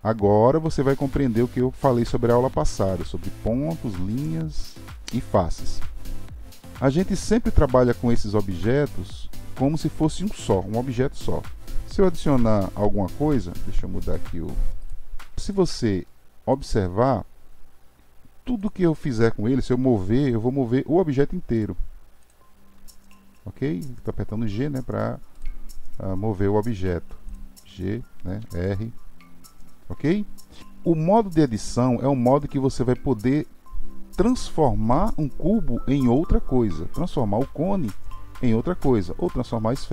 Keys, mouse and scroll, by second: 14.8 shift+right click, 15.4-16.6 drag, 18.6 click, 19.9 g, 22.2-22.6 drag, 22.6 g, 27.3 click, 27.6 g, 37.9-39.9 drag.